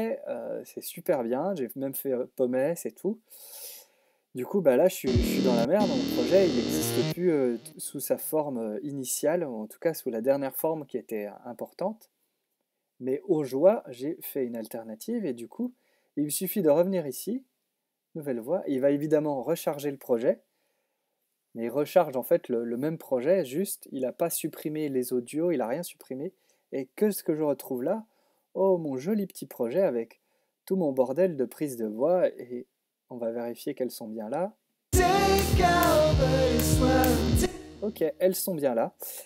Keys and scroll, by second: 0.9 super+z, 1.1 super+s, 4.9 space, 6.9 space, 7.7 x, 37.2 space.